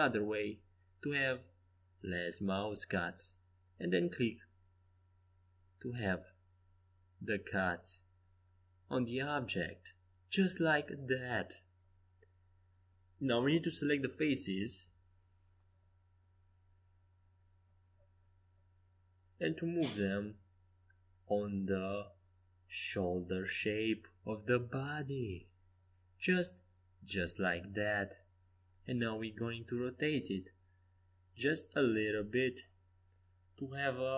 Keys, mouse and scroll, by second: 9.7 a, 12.1-13.9 drag, 13.5 c, 18.9 g, 25.8 r.